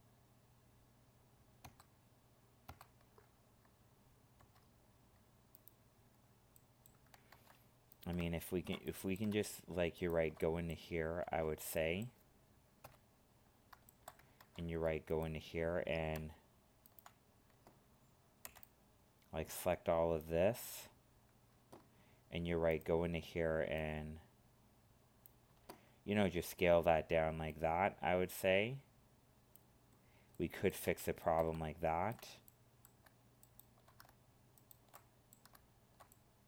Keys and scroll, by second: 7.3 ctrl+Tab, 14.4 ctrl+Tab.